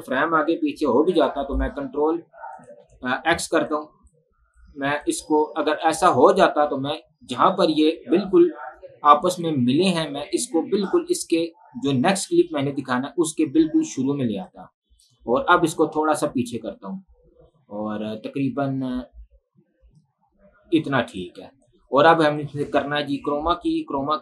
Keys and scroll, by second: 1.3 ctrl+k, 2.9 Delete.